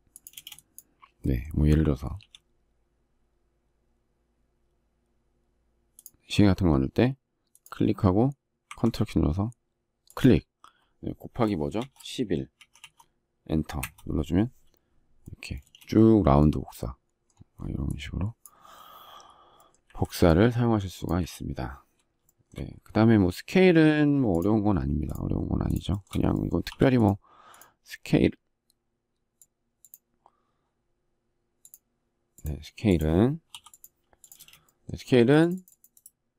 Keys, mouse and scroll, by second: 0.0 space, 11.5 shift+8, 12.3 1, 13.5 Return, 15.3 space, 19.5 Delete, 22.1 shift+middle click, 25.6 shift+middle click, 25.7 shift+double middle click, 26.4 p, 33.7 space, 34.5 shift+middle click.